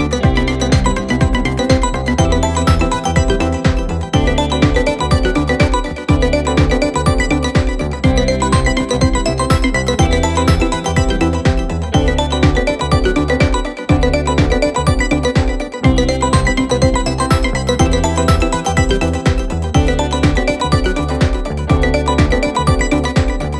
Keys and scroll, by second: 1.1 ], 2.0 4, 8.2 m, 8.6 Return, 9.4 3, 10.7 t, 10.8 Return, 11.8 4, 13.0 shift+i, 18.2 3, 20.5 g, 20.7 s, 20.8 Return.